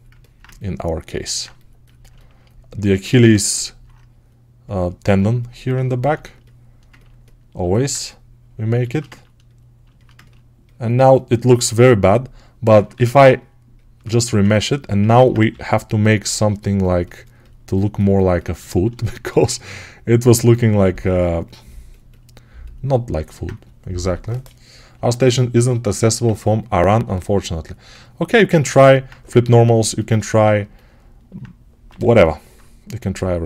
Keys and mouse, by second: 1.2-5.6 shift+right drag, 12.8 ctrl+r, 14.2-23.1 ctrl+alt+drag, 15.4 g, 23.1-29.3 alt+right drag, 26.8 1, 29.8-31.8 shift+right drag, 31.8-33.4 alt+drag, 31.8 g.